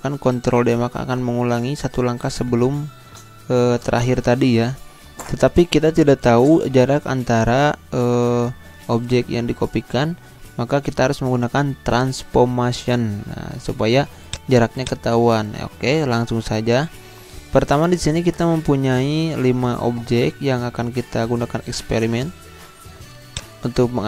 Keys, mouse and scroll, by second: 14.3-16.2 drag, 16.2 Delete, 23.3 click.